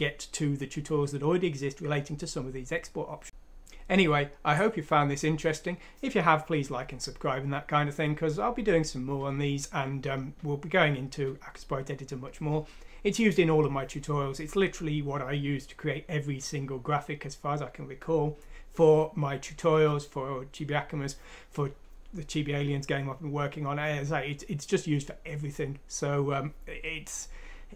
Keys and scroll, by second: 4.8 ctrl+alt+&.